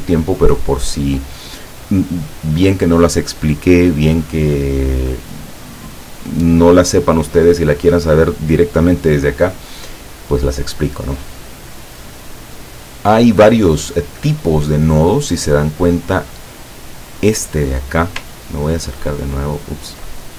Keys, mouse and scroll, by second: 16.8 click, 18.4-19.0 ctrl+scroll up 2, 19.4-19.8 ctrl+scroll down 2.